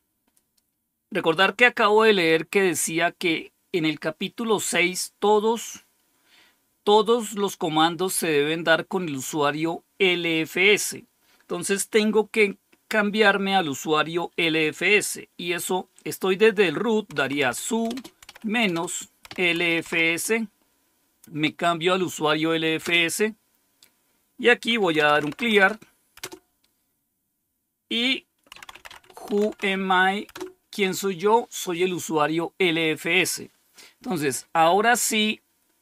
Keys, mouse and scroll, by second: 17.0-20.3 typing, 22.7 Return, 24.6-25.9 typing, 26.1 Return, 28.2-30.1 typing, 30.2 Return.